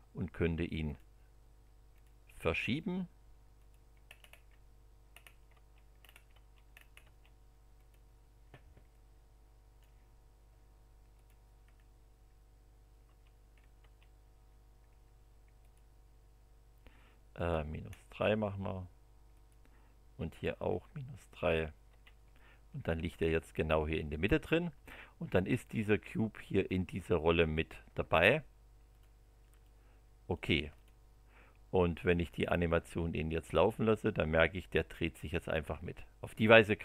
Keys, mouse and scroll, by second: 0.8 click, 1.9 click, 3.5 click, 4.0-4.5 scroll up 1, 4.5 scroll down 1, 5.1 scroll up 1, 5.5 Return, 6.0-6.3 scroll up 1, 6.3 Return, 6.7-7.6 scroll up 1, 7.8 click, 8.9-10.0 drag, 11.1 click, 11.6-12.0 scroll down 1, 12.0 scroll up 1, 13.0 Return, 13.5 scroll down 1, 13.7 middle click, 13.8 Return, 15.6 click, 17.3 click, 17.8 scroll up 1, 19.3 click, 20.3-20.9 scroll down 2, 21.3 scroll down 1, 21.9 Return, 22.3 click, 22.5-24.4 middle drag, 26.9 click, 28.9 click, 29.6 middle click, 30.7 click, 33.5-36.6 drag.